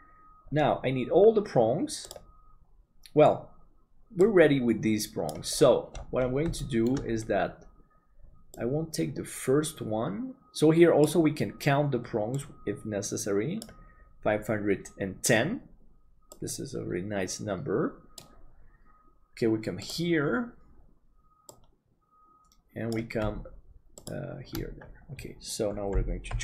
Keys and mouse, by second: 6.6 shift+middle click.